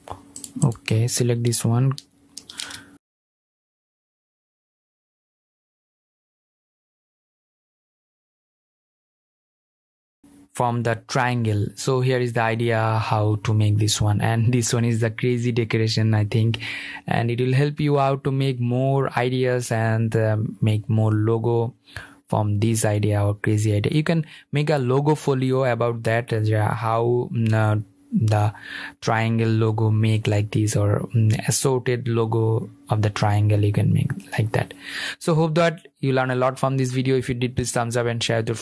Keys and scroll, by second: 2.2 super+g, 3.0 super+g, 3.0 super+z, 4.3 super+g, 5.3 super+g, 6.2 super+g, 8.3 super+g, 8.7 super+z, 10.1 super+0.